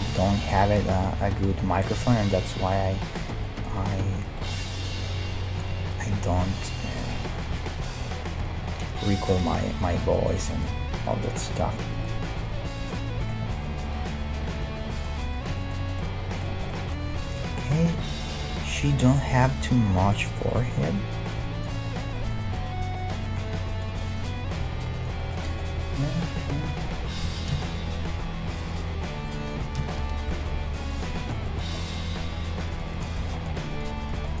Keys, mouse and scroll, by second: 0.7 g, 0.9 right click, 2.2 middle click, 2.8 g, 5.2 g, 5.9 click, 6.3 g, 6.7 click, 6.8-7.8 right drag, 8.0 g, 9.7 middle click, 10.3-12.2 right drag, 10.9 g, 12.0-13.9 middle drag, 14.4-25.1 middle drag, 21.7-23.4 right drag, 22.5 g, 23.8-25.3 right drag, 25.2-28.3 middle drag, 25.8 e, 27.3 s, 29.6 s, 31.0 middle click, 32.2 g, 33.8-34.4 right drag.